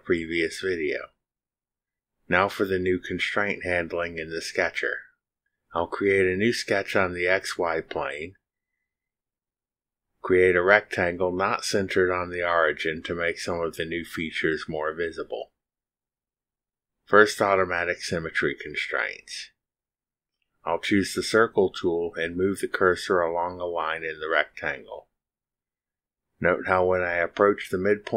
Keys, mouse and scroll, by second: 7.3 click, 9.1 click, 11.4 click, 13.4 click, 15.2 click, 15.8 scroll up 2, 16.3 scroll down 2, 17.6 click, 20.0-20.5 scroll down 3, 22.2 click.